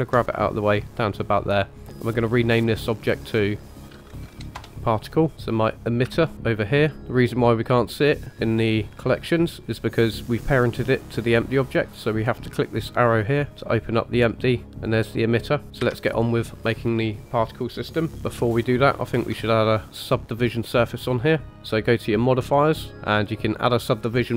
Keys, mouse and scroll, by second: 3.0 click, 3.2 click, 5.3-5.7 shift+middle drag, 5.3-5.7 scroll up 2, 6.1 shift+middle drag, 6.5 click, 8.4 click, 12.9 click, 14.7 click, 15.8 KP_1, 18.2-18.7 shift+middle drag, 19.0 scroll up 2, 19.5 shift+middle click, 22.2 click.